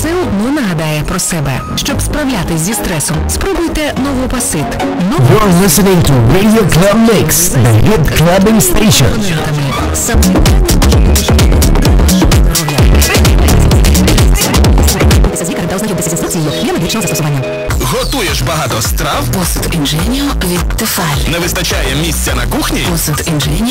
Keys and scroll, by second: 15.3 Page_Down.